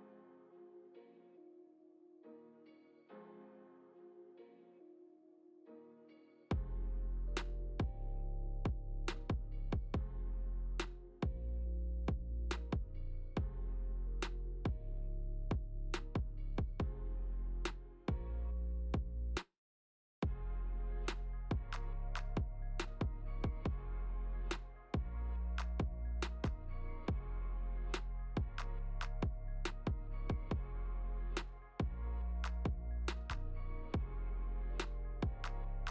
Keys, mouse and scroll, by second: 0.0 scroll up 2, 0.0 x, 0.9 click, 4.9 scroll up 1, 5.5 scroll up 3, 5.7 click, 6.0-6.8 scroll up 11, 6.9 shift+middle click, 8.3 r, 16.2 Tab, 16.2 middle click, 16.2 click, 16.8 Tab, 17.3 click, 17.8 click, 19.4 click, 19.9 shift+click, 20.1 shift+click, 20.6 middle click, 21.5 x, 22.1 middle click, 23.1 click, 23.4 click, 23.7 shift+click, 24.0 x, 24.4 middle click, 25.2 Tab, 25.6 g, 26.5 middle click, 26.6-27.2 scroll down 8, 27.0 middle click, 27.4 right click, 28.1 g, 29.2 middle click, 29.7 middle click, 29.7 scroll down 1, 30.7 click, 31.2 middle click, 31.4 middle click, 32.5 g, 33.7 middle click.